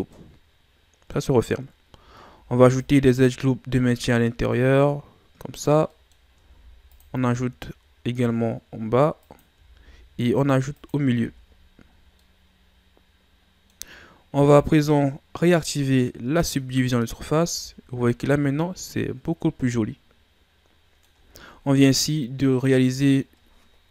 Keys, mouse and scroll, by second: 0.1-1.5 middle drag, 1.5-2.3 scroll up 1, 2.3 ctrl+r, 5.9 middle click, 6.5 ctrl+r, 9.7 ctrl+r, 11.2 Tab, 11.4-12.1 scroll down 6, 12.1-15.2 middle drag, 16.4 click, 17.2-17.9 scroll down 4, 17.5 a, 18.1-21.0 middle drag, 21.3 scroll down 4, 21.7-23.9 middle drag.